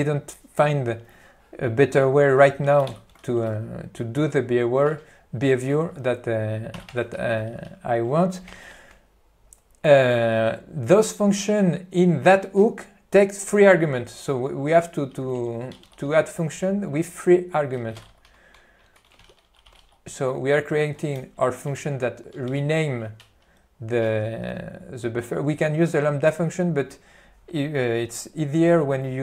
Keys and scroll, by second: 3.0 ctrl+g, 7.0-8.0 typing, 8.6 ctrl+p, 16.0 ctrl+g, 16.8 Left, 18.4 p, 19.3 q, 20.7 Tab, 21.3 ., 22.6 ctrl+g.